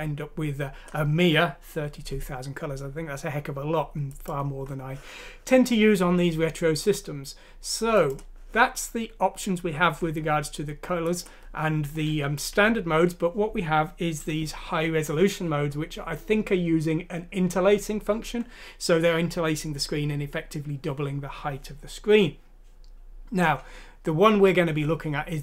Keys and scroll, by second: 12.7 shift+;.